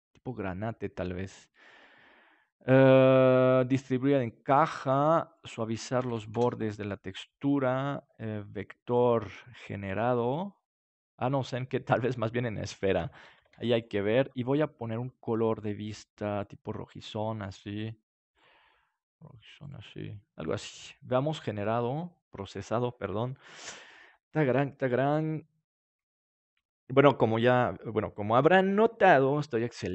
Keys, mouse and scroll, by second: 0.0-1.9 drag, 2.8-4.5 drag, 5.3-7.1 drag, 8.9-12.4 drag, 13.5 ctrl+s, 15.4-20.0 drag, 20.3-24.8 drag.